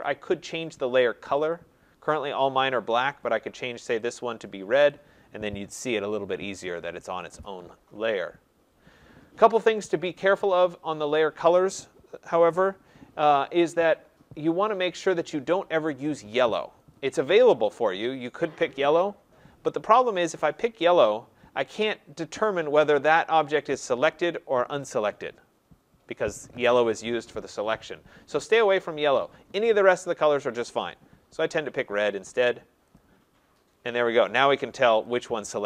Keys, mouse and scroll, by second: 1.5 click, 3.2 click, 4.1 click, 4.9 click, 16.9 click, 20.0 click, 21.0 click, 21.7 click, 23.1 click, 24.2 click, 29.2 click, 30.7 click, 31.5 click, 33.0 click, 34.2 click, 35.1 click.